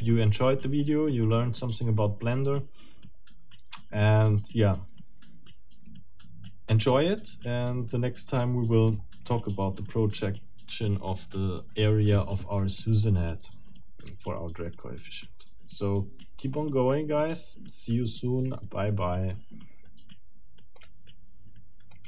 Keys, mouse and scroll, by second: 12.6-18.7 middle drag, 20.7 click, 21.9 click.